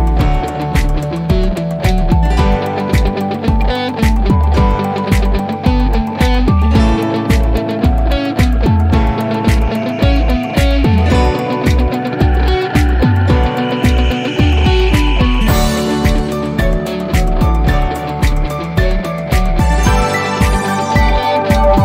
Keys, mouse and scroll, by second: 20.6 click, 21.4-21.8 scroll down 1.